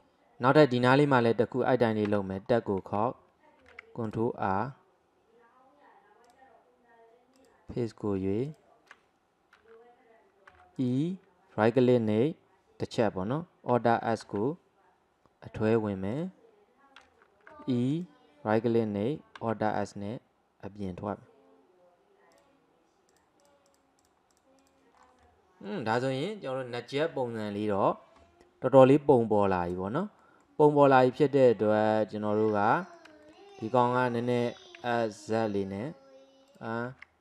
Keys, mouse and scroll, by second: 2.2 Tab, 2.4-3.6 scroll up 1, 3.6 ctrl+r, 7.4 click, 8.5 alt+click, 10.6 e, 14.3 alt+s, 17.6 e, 19.4 alt+s, 23.2 click, 23.4 click, 24.4 click, 25.0 scroll down 1, 25.3-29.3 middle drag, 29.7-30.8 middle drag, 30.8 scroll up 2, 31.1 scroll down 2, 31.6-33.3 middle drag, 34.5 s, 37.0 ctrl+z.